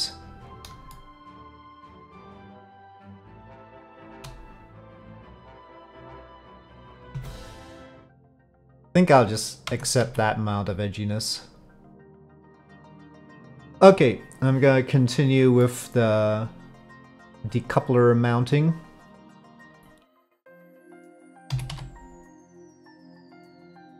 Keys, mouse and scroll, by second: 0.2 click, 1.0 shift+middle click, 2.1 Tab, 2.1 1, 3.7 shift+click, 4.4-6.8 drag, 7.1 Tab, 7.7 middle click, 9.7 Tab, 10.0 a, 12.5 click, 12.6 middle click, 13.2 middle click, 15.6 middle drag, 20.6 click, 21.5 s.